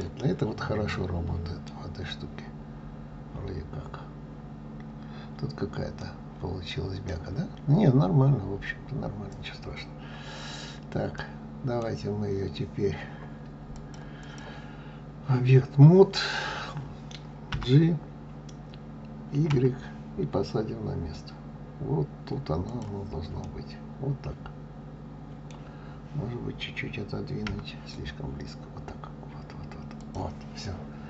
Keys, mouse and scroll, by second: 0.8-2.1 middle drag, 2.1-2.6 scroll up 4, 2.6-3.4 scroll down 2, 3.4 scroll down 1, 3.5-4.1 scroll up 2, 4.3 scroll down 1, 5.1-5.8 scroll up 2, 5.9-8.7 middle drag, 8.7-9.3 scroll down 2, 9.3-9.7 scroll down 2, 9.7-10.0 scroll up 1, 10.0-10.7 scroll down 1, 10.7-11.1 scroll up 2, 11.1-13.7 middle drag, 13.7-16.7 drag, 17.4 g, 23.3-26.3 middle drag, 27.4 g, 30.5-31.0 middle drag.